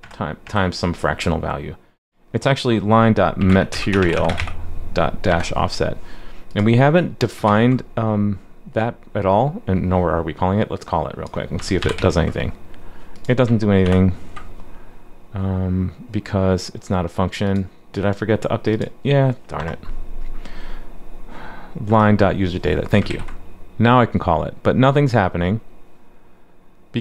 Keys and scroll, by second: 7.5 super+s, 11.8 super+/, 11.9 super+s, 14.1 alt+super+j, 23.1 super+s.